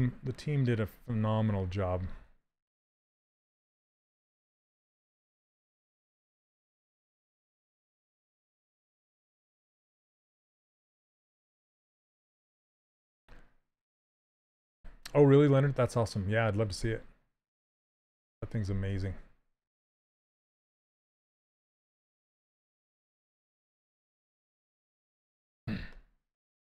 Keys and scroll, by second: 1.7 s, 2.6 shift+f, 6.5 w, 26.6 s.